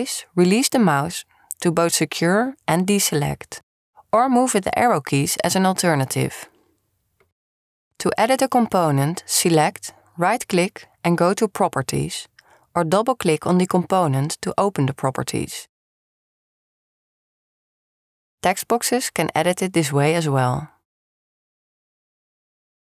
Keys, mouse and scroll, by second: 3.8 click, 10.3 click, 11.2-13.1 right drag, 19.9 click, 20.4 click, 21.3 click.